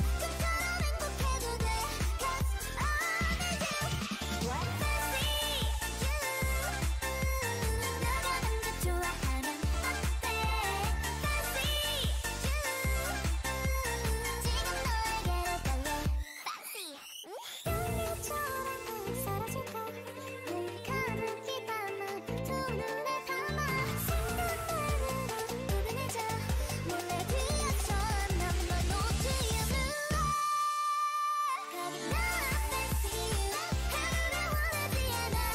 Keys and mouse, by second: 7.7 shift+a, 9.5 KP_1, 10.3 shift+a, 14.1 t, 17.2-19.0 drag, 20.0 z, 21.3 ctrl+Tab, 21.8 ctrl+Tab, 23.5 ctrl+Tab, 24.2 click, 24.4 x, 25.3 x, 26.4 KP_1, 27.4 a, 27.8 r, 30.1 s, 31.7 s, 33.4 shift+a, 34.3 Tab, 34.6 shift+a.